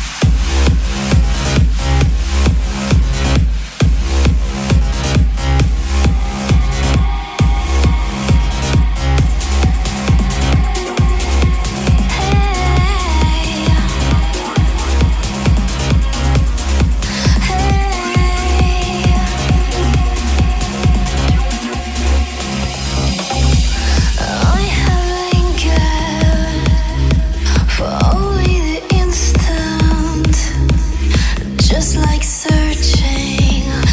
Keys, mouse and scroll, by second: 5.7-7.5 typing, 8.5-23.8 drag, 26.1-27.1 typing, 28.0-31.0 drag, 33.2-33.9 typing.